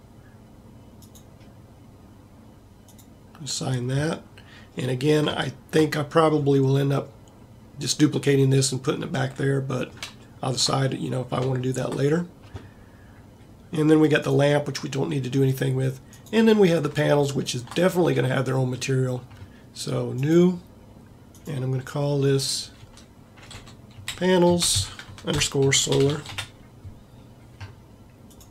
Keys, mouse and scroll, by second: 18.2 middle click.